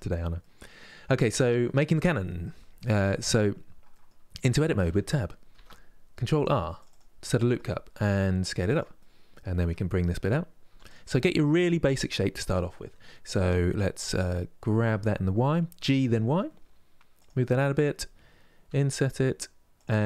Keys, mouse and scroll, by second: 4.5 Tab, 5.2 ctrl+r, 7.0 middle click, 7.6 s, 8.6-10.4 middle drag, 10.4 3, 10.6 click, 10.9-13.9 middle drag, 17.2-18.3 middle drag, 18.3 i.